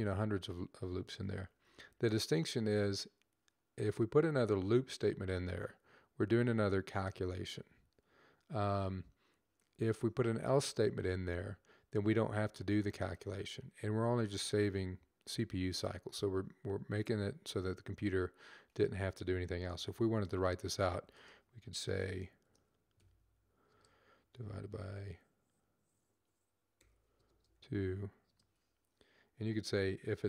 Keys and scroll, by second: 2.4 Up, 5.2 typing, 19.4-22.7 typing, 26.4-27.3 typing.